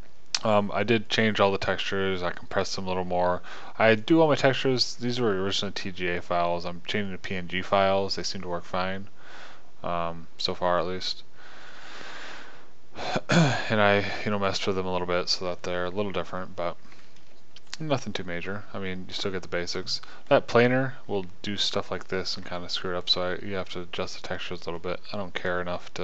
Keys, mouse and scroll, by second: 3.4-4.4 middle drag, 8.1 middle click, 10.4 middle click, 12.9-14.3 middle drag, 15.1 middle click, 15.7-18.1 middle drag, 18.3 middle click, 23.0 shift+middle click.